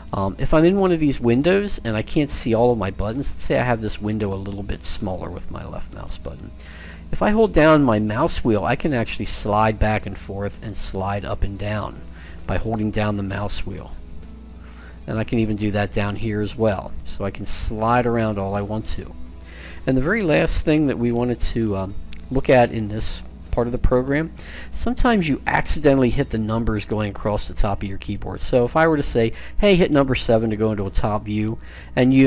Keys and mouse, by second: 4.6-6.4 drag, 7.9-13.5 middle drag.